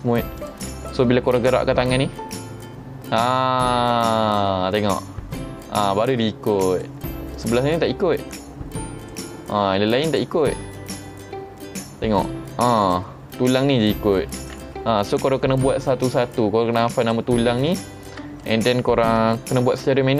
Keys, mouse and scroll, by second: 0.4 click, 1.9 r, 6.7 right click, 7.4 click, 7.8 r, 9.0 right click, 10.2 click, 10.6 r, 12.2 right click, 12.9 click, 13.4 r, 14.4 right click, 16.3 ctrl+Tab, 17.1 click, 17.8 Tab, 18.1 middle click, 19.9 middle click.